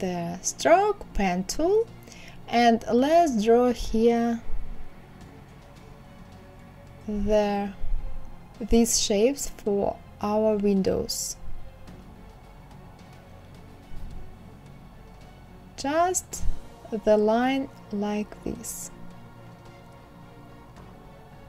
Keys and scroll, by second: 5.1 Escape, 9.3 Escape, 12.1 Escape, 12.7 Escape, 21.0 Escape.